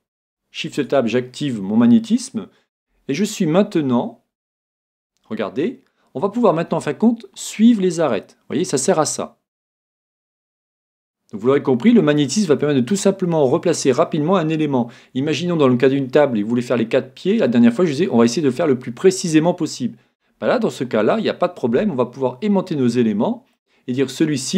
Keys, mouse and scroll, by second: 5.0 g, 23.7-24.5 drag, 24.4-24.5 middle drag.